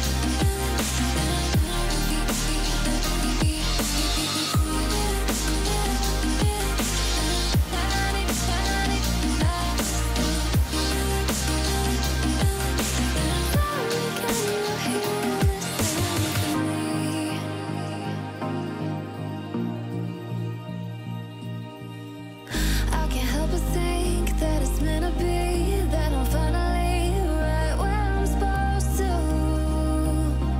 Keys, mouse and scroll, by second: 12.0 alt+click, 13.1 alt+scroll up 1, 14.4 right click, 18.1 click, 21.4 click, 23.3 shift+click, 24.1 right click, 25.5 click, 26.4-27.0 alt+scroll down 1, 27.4-28.0 alt+scroll up 1, 28.0-29.7 drag.